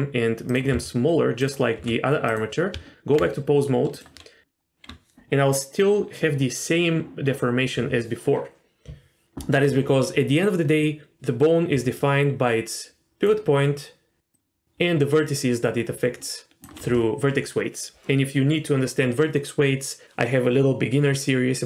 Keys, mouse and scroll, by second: 0.7 s, 1.8 s, 2.7 Tab, 3.9 click, 11.7 d, 11.9-13.3 drag, 13.2-14.3 d, 14.3-16.6 drag, 16.6 d, 16.7 d.